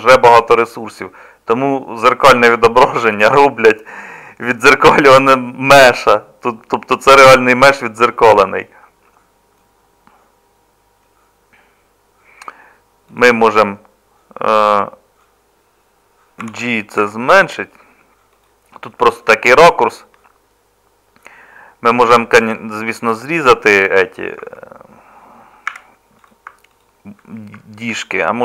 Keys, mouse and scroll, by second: 16.4 g, 24.4 Tab, 25.7 Tab.